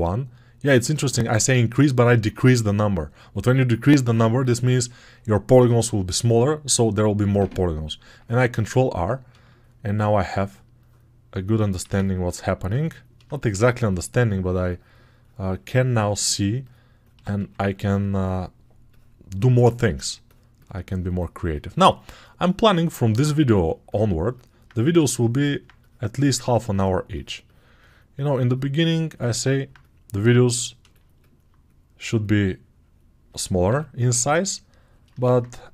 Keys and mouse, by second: 8.5 ctrl+r, 17.2 2, 24.2 alt+click, 24.4-25.4 alt+drag, 29.0-35.7 alt+drag, 30.4 right click, 33.5 6.